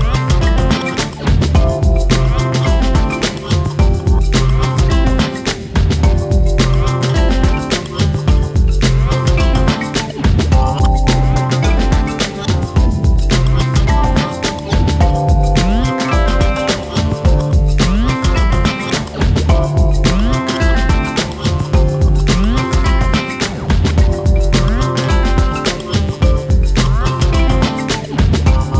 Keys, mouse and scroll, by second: 0.2 click, 0.8 shift+click, 2.3 click, 2.6 click, 2.7-3.1 scroll down 1, 3.1 Tab, 3.3 click, 3.5 scroll down 1, 3.6-4.1 middle drag, 4.1 scroll up 3, 4.3 shift+middle click, 4.5 click, 5.3 click, 7.9 click, 8.8 click, 9.4 click, 10.6 click, 10.9-11.4 scroll down 5, 11.4-11.7 shift+middle drag, 11.7 scroll up 2, 11.9-12.4 shift+middle drag, 12.4-12.7 scroll up 1, 12.7 click, 13.6 click, 15.3 click, 18.9-20.5 drag, 20.5-22.2 drag, 23.3 click, 23.4-23.7 scroll down 2, 23.7-25.0 middle drag, 25.0 scroll down 1, 25.2-25.6 shift+middle drag, 25.6 scroll down 1, 25.7-26.0 shift+middle drag, 26.0 scroll up 2, 26.1-26.6 shift+middle drag, 26.6 click, 27.1 click, 28.2 click.